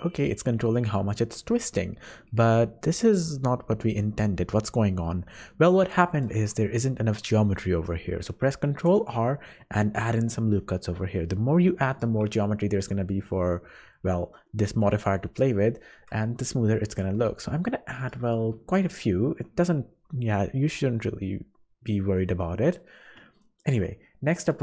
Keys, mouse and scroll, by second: 5.0 middle click, 6.3 Tab, 8.7 ctrl+r, 16.0 ctrl+z, 16.9 ctrl+r, 19.5 Tab, 19.9-20.2 scroll down 2, 20.8 middle click, 20.8-21.5 scroll down 1, 22.2 middle click, 22.6 scroll up 4, 23.3 shift+middle click, 23.7 shift+middle click.